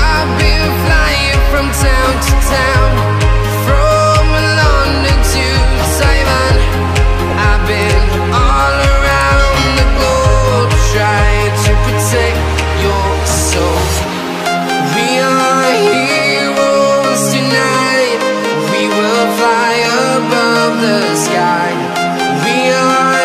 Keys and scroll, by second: 1.7 ctrl+shift+a.